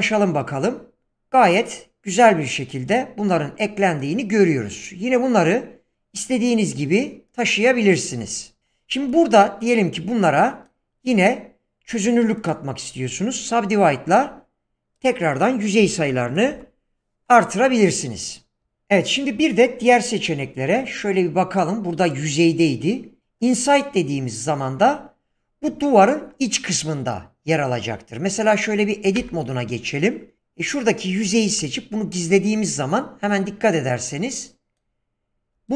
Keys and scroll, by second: 8.1 Tab, 15.6-16.6 typing, 18.6 Tab, 29.2 Tab, 30.4 3, 31.6 h.